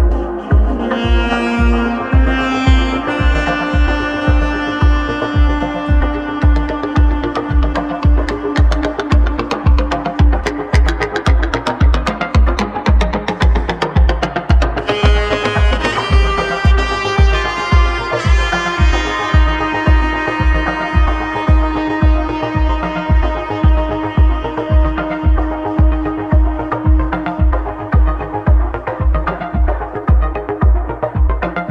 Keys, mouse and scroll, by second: 6.5-7.6 middle drag, 7.6-8.7 scroll up 2, 8.7 click, 9.9-12.4 middle drag, 17.7 scroll up 2, 18.0-18.5 scroll down 2, 18.5 shift+middle click, 19.2-19.8 scroll down 2, 19.8-22.8 shift+middle drag, 21.8-22.8 scroll down 11, 22.8 click, 25.6 click, 29.5-31.7 middle drag, 31.6 shift+s.